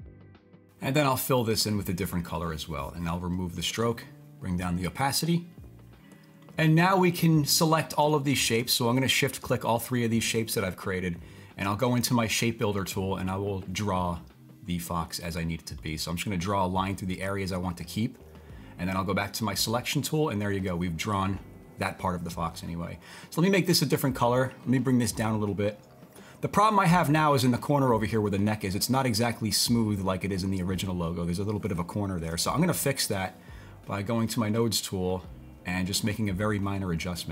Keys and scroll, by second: 32.3 super+z.